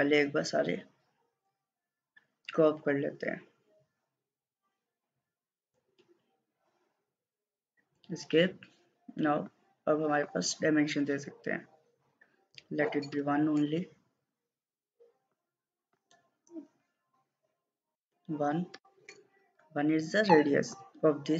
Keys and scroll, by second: 7.0 Escape, 7.8 Escape, 12.9 1, 13.2 Return, 18.0 1, 18.8 Return.